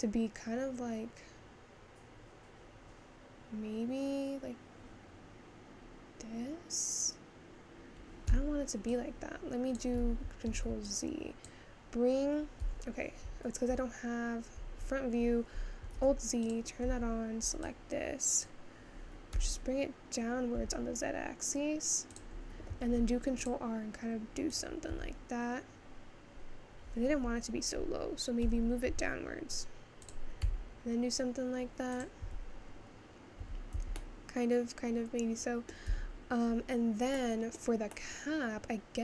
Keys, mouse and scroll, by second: 10.2 ctrl+z, 10.6 ctrl+z, 10.8 click, 12.7 Tab, 12.7 `, 15.9 alt+z, 16.5 click, 16.9 Tab, 18.4 click, 19.4 g, 22.9 ctrl+r, 25.0 s, 32.3 Tab, 33.4 Tab, 33.9-36.0 middle drag, 36.0 Tab, 36.5-37.2 scroll up 3, 37.2-39.0 middle drag.